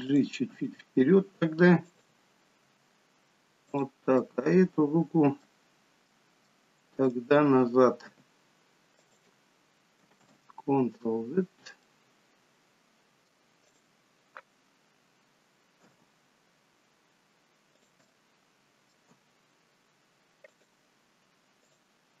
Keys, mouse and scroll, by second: 0.5 r, 2.7 g, 4.2 middle click, 6.1 middle click, 7.0 click, 8.1 g, 10.5 ctrl+z, 11.3-11.9 scroll up 3, 11.9 middle click, 13.7 click, 15.9 g, 18.0 middle click, 19.1 g, 21.6 click.